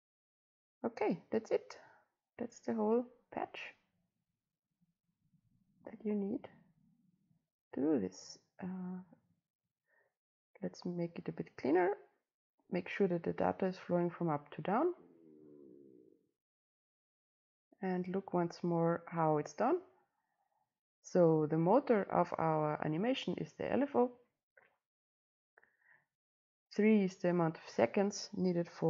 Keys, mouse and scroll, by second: 11.1 click, 11.2-13.3 middle drag, 11.2-13.3 scroll up 2, 15.7 click.